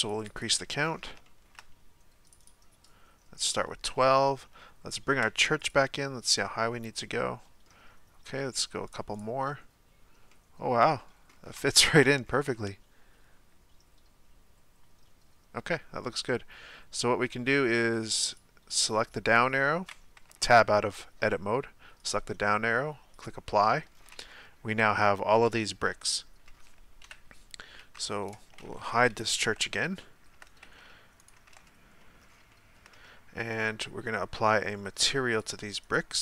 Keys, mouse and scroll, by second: 0.8-1.2 scroll down 1, 1.2-2.3 shift+middle drag, 2.3-3.5 drag, 3.5-5.6 middle drag, 5.6 click, 6.5-8.9 middle drag, 8.9 click, 10.3-11.3 middle drag, 11.3-11.6 scroll up 1, 11.6-12.1 shift+middle drag, 12.1-12.5 scroll up 1, 12.5-18.2 middle drag, 18.2 click, 20.3 Tab, 22.0-23.9 drag, 23.9-24.3 scroll down 1, 24.3 Tab, 24.9-27.0 middle drag, 27.0 KP_1, 27.9 Tab, 28.3 right click, 29.4 h, 30.0-30.6 shift+middle drag, 30.6 Tab, 31.2 right click, 31.5 Tab, 32.1-32.4 scroll down 3, 32.5-35.3 shift+middle drag, 35.3 click.